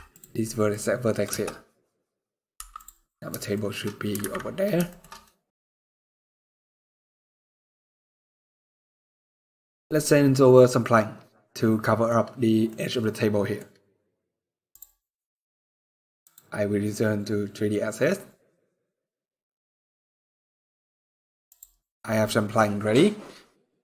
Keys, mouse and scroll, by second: 0.1 middle click, 0.4-0.9 scroll up 3, 0.9 KP_0, 1.7-2.2 scroll up 7, 2.2 Tab, 3.2 shift+middle click, 3.4 shift+scroll down 1, 3.9 alt+a, 4.2 scroll down 2, 4.6 shift+middle click, 4.9 middle click, 5.4 scroll down 1, 5.7 ctrl+s, 6.0 scroll down 2, 6.2 middle click, 6.7 scroll down 1, 8.6 middle click, 9.0 scroll up 2, 11.5 middle click, 11.8 scroll up 2, 12.4 middle click.